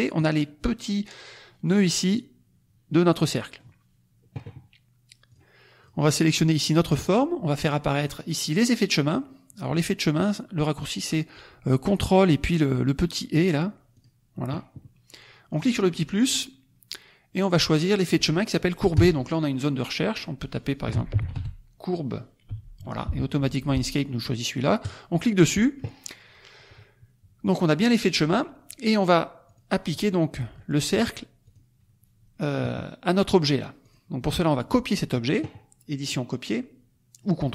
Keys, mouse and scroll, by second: 3.1 middle click, 5.2 click, 5.7 click, 7.9 click, 13.9 click, 15.5 click, 17.4 click, 18.0 click, 18.9 BackSpace, 20.1 click, 20.6-22.6 typing, 24.8 click, 29.5 click, 31.6 click, 33.8 click, 36.0 click.